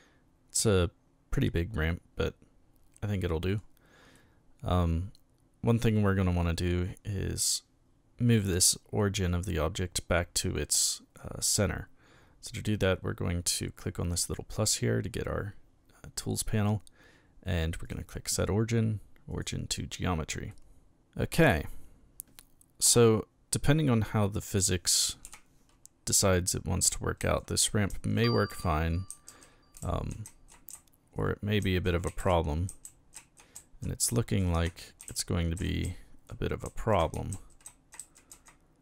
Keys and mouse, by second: 4.1-5.7 middle drag, 14.1 click, 17.9 click, 19.3 click, 20.5-20.9 middle drag, 25.2 p, 26.9-38.8 typing.